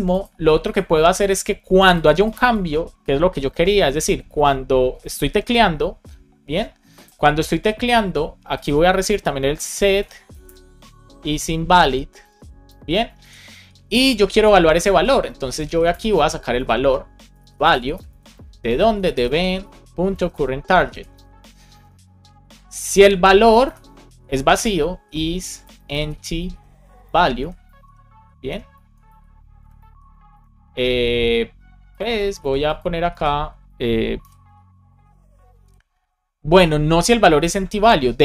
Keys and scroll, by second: 9.9 space, 10.8 shift+i, 12.1 Down, 12.6 Return, 13.1 shift+super+Left, 14.3 Down, 14.5 Up, 14.8 super+Right, 15.1 Return, 15.9 space, 16.6 shift+[, 17.2 space, 17.9 Right, 18.2 space, 20.8 Down, 21.0 Return, 22.3 Return, 22.9 shift+9, 24.4 alt+Left, 25.5 shift+e, 26.4 shift+9, 27.0 super+Right, 27.2 Left, 27.5-28.4 typing, 28.9 Right, 29.5 space, 29.8 shift+[, 30.2 Return, 32.3 super+c, 33.0 super+v, 34.1 shift+9.